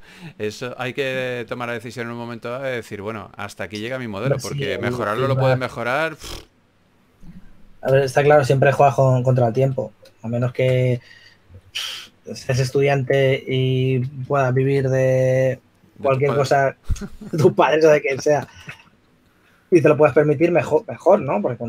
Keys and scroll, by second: 12.7 2, 13.8 typing, 19.4 super+w, 21.1 s.